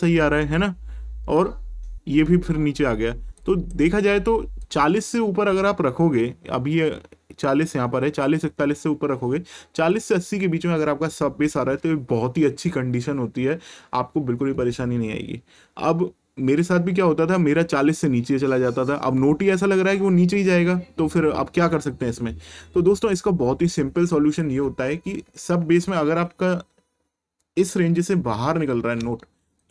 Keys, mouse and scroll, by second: 3.4 click, 9.9 click, 22.9 click, 29.6 ctrl+shift+click.